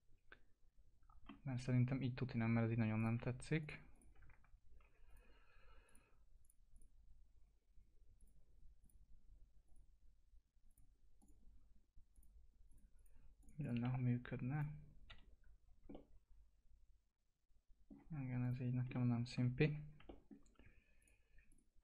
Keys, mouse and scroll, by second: 1.4 scroll down 1, 2.9 click, 4.5 alt+q, 5.0 click, 13.8 F4, 14.5 click, 15.0 p, 15.6 scroll down 1, 15.8-18.1 alt+middle drag, 18.1 scroll up 1, 18.4 click, 18.6 scroll down 1, 18.9 alt+middle click, 19.6 F4, 20.0 alt+middle click, 20.9 click.